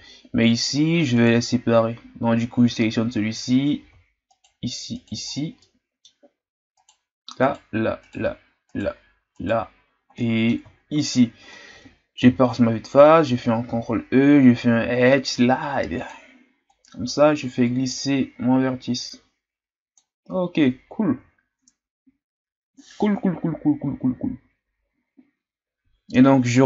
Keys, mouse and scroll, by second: 1.1-4.1 right drag, 4.3-5.3 shift+right drag, 5.3-5.6 scroll down 1, 5.6-6.8 middle drag, 6.8-10.1 shift+right drag, 10.1 middle click, 10.9-12.2 shift+right drag, 12.2 KP_1, 13.7 ctrl+e, 21.0-24.1 ctrl+scroll up 3, 26.3-26.6 shift+scroll down 1.